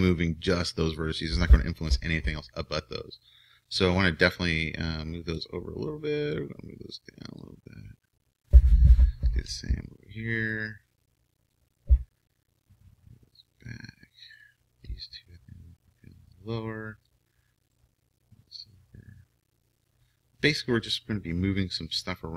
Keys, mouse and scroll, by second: 0.5 o, 6.3-8.4 drag, 8.4-11.5 right drag, 10.5-14.3 drag, 14.3-17.1 right drag, 16.3-18.1 drag, 17.7-19.9 right drag, 18.5-20.3 drag, 20.5 click, 21.0-22.3 right drag, 21.9-22.3 drag.